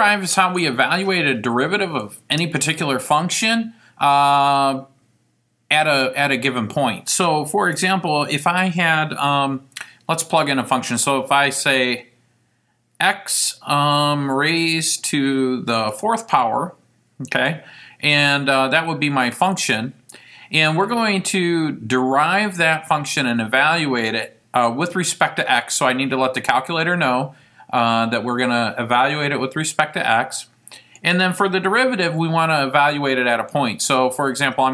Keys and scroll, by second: 15.0 ^, 16.0 4, 19.6 ,, 31.1 ,.